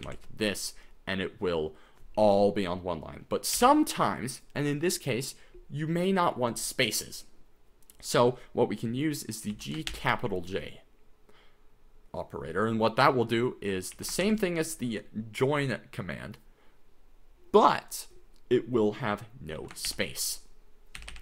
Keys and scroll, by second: 0.0 shift+j, 3.6 u, 9.5 g, 9.9 shift+j, 13.9 g, 14.2 shift+j, 19.4-21.2 typing.